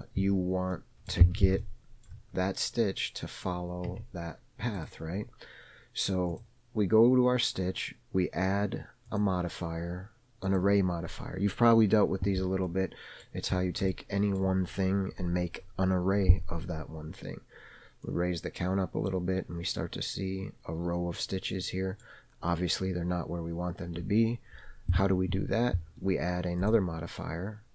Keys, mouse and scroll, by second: 0.5-1.0 scroll up 1, 1.0 middle click, 1.0-1.4 scroll up 1, 1.6 Tab, 1.9 shift+middle click, 4.2 Tab, 5.1 click, 6.6 click, 9.4 click, 10.9 click, 12.9-13.5 middle drag, 13.8-14.1 scroll up 1, 14.2-14.7 shift+middle drag, 18.3-19.4 drag, 21.8-22.3 middle drag, 22.7-25.8 scroll down 1.